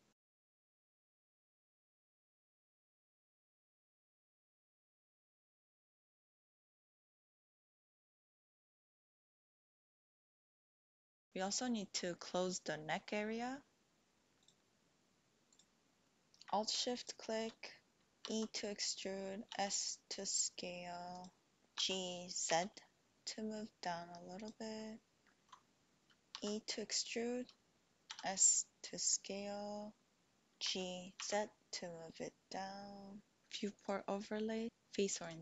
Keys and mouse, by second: 0.4 e, 1.0 s, 2.1 e, 2.6 s, 3.7 KP_1, 4.4 alt+z, 5.3 g, 5.6 x, 6.7 click, 7.7 alt+z, 8.1 click, 9.0 click, 9.7 middle click, 10.9 middle click, 14.3-15.8 drag, 16.1 middle click, 16.8 alt+shift+click, 18.2 e, 19.5 s, 21.1 click, 21.7 g, 22.4 z, 24.4 click, 26.3 e, 28.1 s, 30.5 ctrl+z, 30.6 g, 31.0 z, 33.8-35.4 drag.